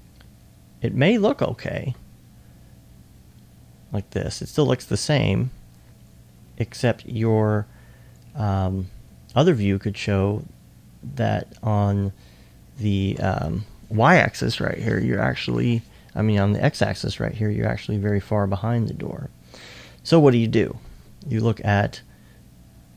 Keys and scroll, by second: 21.2 2, 22.8 2.